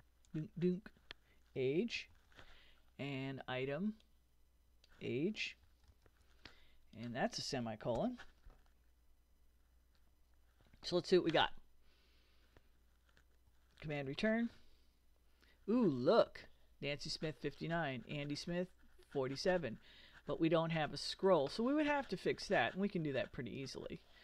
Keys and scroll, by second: 0.3 BackSpace, 1.3-2.6 typing, 5.4-6.6 typing, 8.0 ;, 14.1 super+Return.